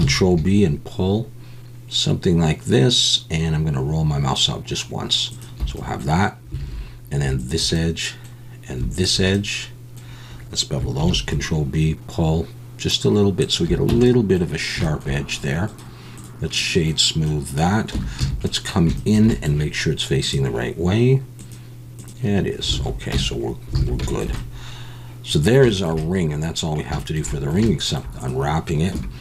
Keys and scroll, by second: 0.0 ctrl+b, 6.6 alt+a, 11.0 ctrl+b, 13.9 Tab, 17.9 Tab, 18.2 a, 22.8 alt+a, 23.1 Tab, 23.8 alt+a, 28.9 Tab.